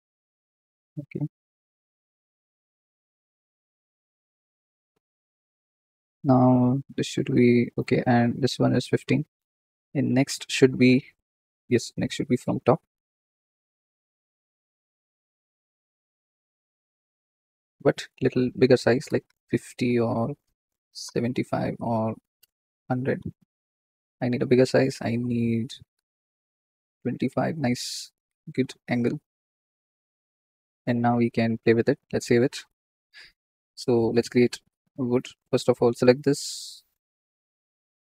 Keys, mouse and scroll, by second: 0.9 KP_7, 1.8 r, 7.9 click, 8.3 click, 9.7 KP_0, 11.5 KP_1, 12.3 shift+d, 13.1 middle click, 13.5 click, 14.3-23.1 drag, 23.1 KP_0, 28.3 g, 29.4-30.0 scroll down 5, 30.0-31.3 scroll up 2, 31.3-32.4 drag, 33.4 scroll up 3, 35.1 click, 35.7 click, 36.3-36.9 scroll up 10.